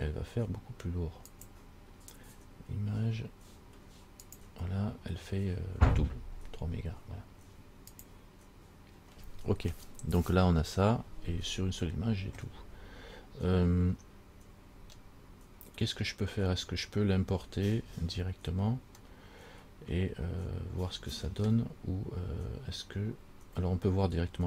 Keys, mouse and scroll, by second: 1.5 click, 8.3 click, 14.1-14.9 scroll down 1, 14.9-18.2 scroll down 3, 19.2 middle click.